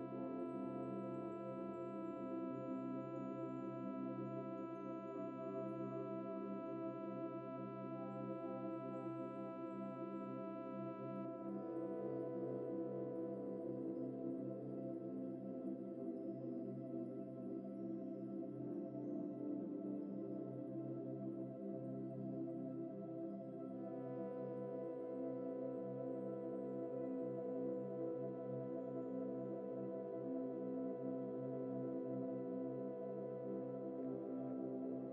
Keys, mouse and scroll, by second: 1.3 g, 2.7 middle click, 4.5 g, 5.9 middle click, 8.3 g, 17.8-19.2 typing, 34.1 scroll up 1, 34.4 shift+middle click.